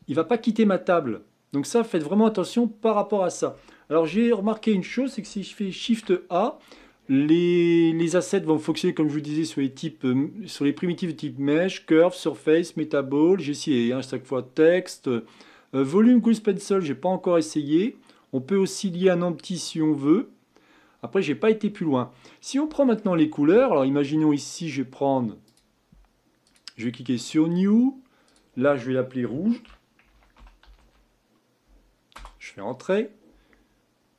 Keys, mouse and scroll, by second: 0.2-3.3 middle drag, 4.2-5.8 shift+middle drag, 5.8 shift+a, 22.3-24.0 middle drag, 24.0 scroll down 2, 25.4 click, 26.4-31.4 drag.